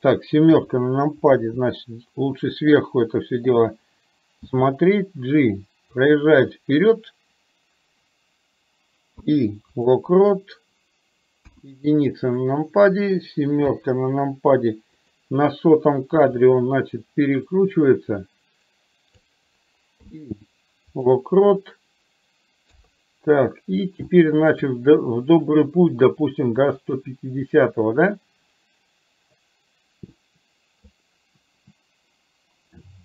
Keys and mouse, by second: 0.5 KP_7, 11.4 KP_1, 13.7 KP_7, 15.2 click, 16.5-19.3 drag, 22.8 KP_3, 24.2-24.5 shift+middle drag, 26.7 click, 28.3-30.9 drag.